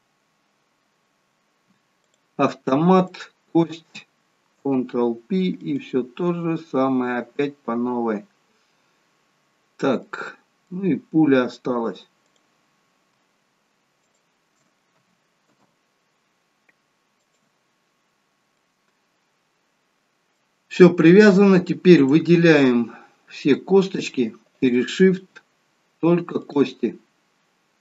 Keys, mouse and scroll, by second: 0.7 scroll up 1, 1.6-2.1 scroll up 1, 2.1 click, 3.1 shift+click, 4.7 ctrl+p, 9.2-10.1 scroll down 2, 10.1 middle click, 10.1 scroll down 1, 11.1-12.3 scroll up 1, 12.3 click, 12.3 scroll up 2, 14.2 shift+click, 15.4 ctrl+p, 18.1-18.5 scroll down 4, 18.7 middle click, 20.9-21.5 scroll up 3, 22.1 click, 22.8 scroll down 2, 23.5 scroll up 1, 24.5 shift+click, 26.4 shift+click.